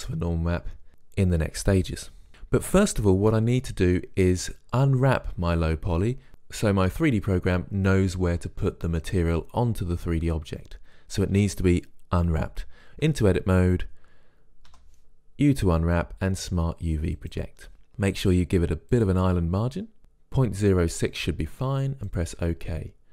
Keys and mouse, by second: 13.2 Tab, 14.9 u.